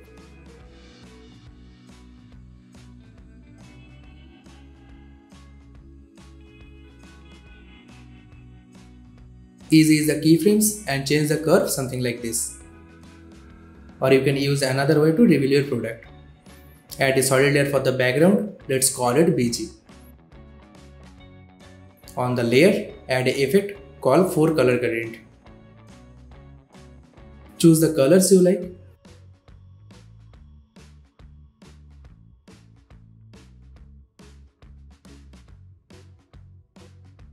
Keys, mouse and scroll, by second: 0.7-2.2 drag, 3.3 space, 3.8 click, 3.8-4.5 click, 4.2 space, 7.9 space, 8.2-9.3 drag, 9.3 F9, 9.8 space, 10.7-13.5 drag, 15.1 click, 16.1 right click, 16.8 click, 18.7-19.6 typing, 19.8 Return, 21.2 click, 23.4 click, 24.9 BackSpace, 25.6-28.4 drag, 33.4-35.5 drag.